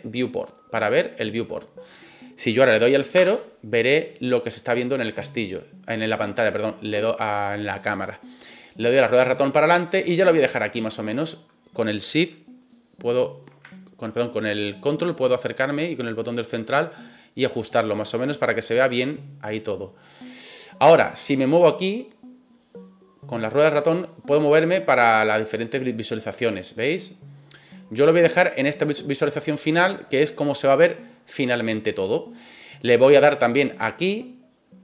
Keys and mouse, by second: 3.1 KP_0, 12.8 shift+middle click, 13.8-17.4 ctrl+middle drag, 18.4-20.4 drag, 25.3 click, 26.2 click, 27.4 click, 34.5 click.